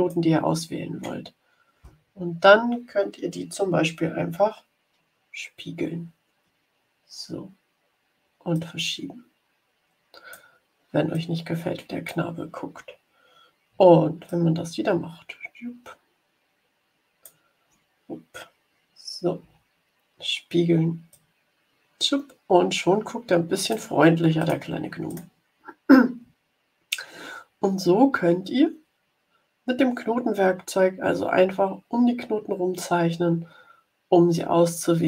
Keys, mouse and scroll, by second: 4.8 h, 8.5-10.5 drag, 11.1-12.3 drag, 14.2-17.5 alt+drag, 19.3 h, 21.1-23.9 drag, 24.3 click, 25.1 click, 26.1 ctrl+scroll down 2, 30.7 ctrl+scroll up 2.